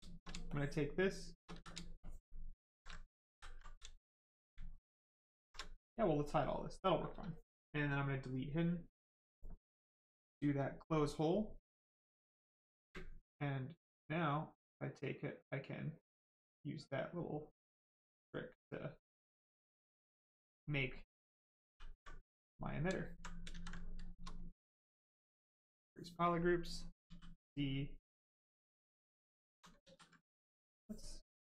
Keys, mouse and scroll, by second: 0.0 shift+right click, 1.5 ctrl+z, 2.9 shift+right click, 3.0 right click, 3.2 ctrl+z, 3.5 right click, 3.6 right click, 3.8 ctrl+right click, 4.2 ctrl+click, 5.8 ctrl+right click, 5.9 right click, 9.0 click, 9.4 right click, 10.6 space, 12.7 space, 13.2 right click, 14.2 click, 20.4 right click, 21.6 ctrl+w, 22.0 right click, 22.9 alt+right click, 23.4 ctrl+right click, 23.5 ctrl+z, 23.7 right click, 25.6 shift+click, 26.4 right click, 27.0 d, 27.4 right click, 29.4 alt+right click, 29.7 ctrl+right click, 29.8 ctrl+z, 30.6 ctrl+click.